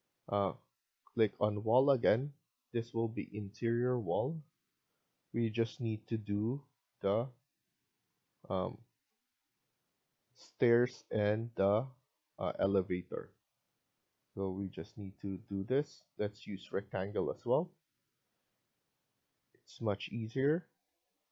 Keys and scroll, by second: 15.4 Escape, 20.7 Escape.